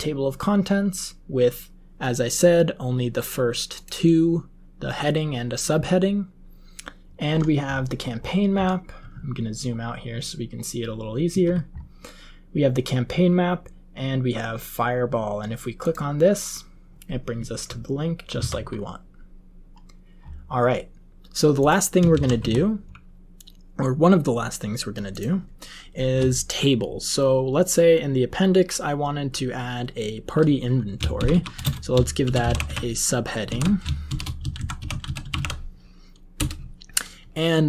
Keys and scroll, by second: 18.3 alt+Left, 22.0 ctrl+x, 22.3 1, 31.1-36.0 typing, 36.3 Return.